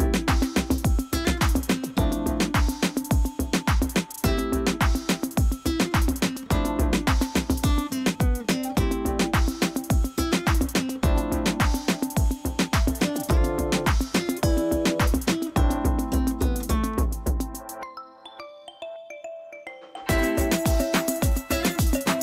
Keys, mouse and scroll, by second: 0.6 alt+click, 3.0 alt+click, 5.9 click, 13.8 alt+click.